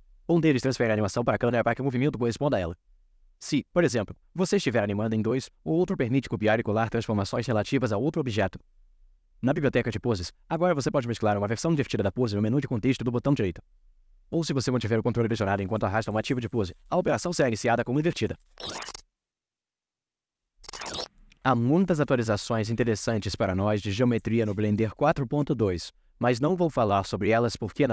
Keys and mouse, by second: 7.2-7.6 Right.